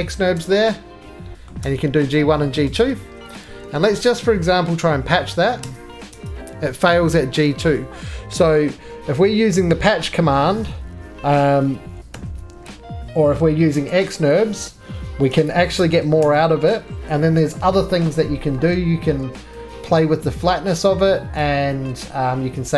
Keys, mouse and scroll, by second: 0.3 Tab, 1.5 middle click, 1.6 Tab, 2.4 middle click, 2.7 middle click, 2.7 right click, 3.4 ctrl+z, 4.8 alt+f, 5.6 Tab, 6.1 Tab, 7.7 middle click, 10.2-16.1 middle drag, 12.1 alt+v, 13.7 Escape, 15.3 alt+v, 15.8 Tab, 16.2 Tab, 16.8 middle click, 21.0 scroll, 21.3 click.